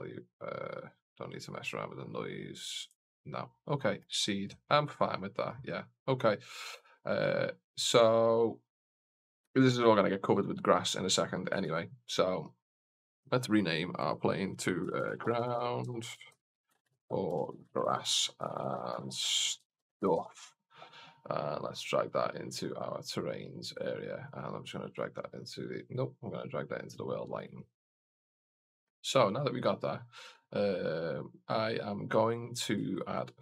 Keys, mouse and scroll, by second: 0.0-3.0 drag, 3.6 middle drag, 4.1 shift+middle click, 5.0 middle click, 7.7-8.0 middle drag, 11.6 shift+z, 12.7 click, 12.9-20.6 drag, 21.4 click, 22.0-22.6 drag, 23.6 click, 24.1-24.8 drag, 25.8-26.7 drag, 27.2 click, 29.1 click, 32.2 middle drag, 32.8 shift+middle drag.